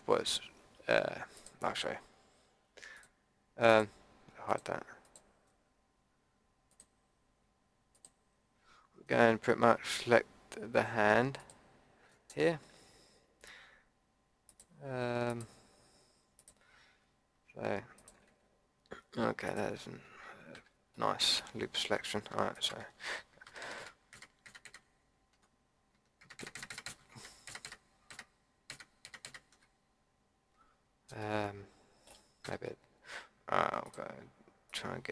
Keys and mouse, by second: 1.3-10.0 drag, 10.0 Tab, 12.0 Tab, 16.7-20.5 drag, 20.5 a, 20.9 click, 23.4 ctrl+KP_Add, 32.4 a, 33.8-35.1 drag.